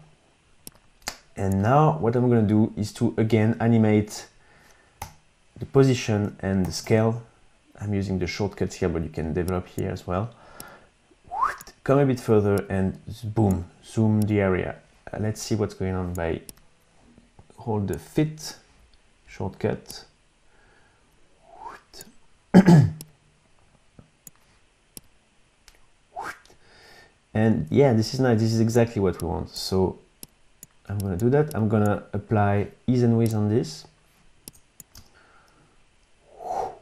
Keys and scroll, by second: 5.0 p, 6.6 shift+s, 35.0 space.